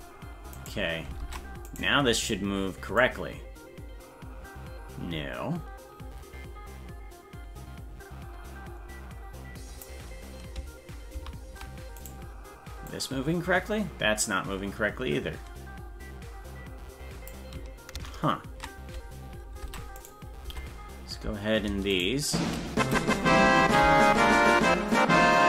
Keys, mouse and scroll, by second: 0.6 right click, 1.2 ctrl+Tab, 1.8 right click, 3.0-9.9 drag, 11.2 ctrl+z, 12.1 right click, 12.9-17.4 drag, 18.2 ctrl+z, 19.6 ctrl+Tab, 20.0 right click, 20.5 Tab, 21.9 shift+right click, 23.6 ctrl+l.